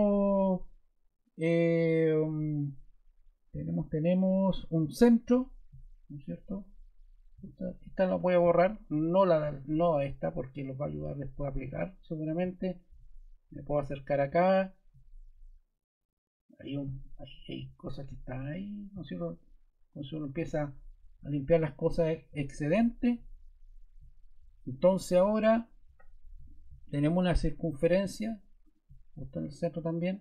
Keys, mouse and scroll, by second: 7.3 t.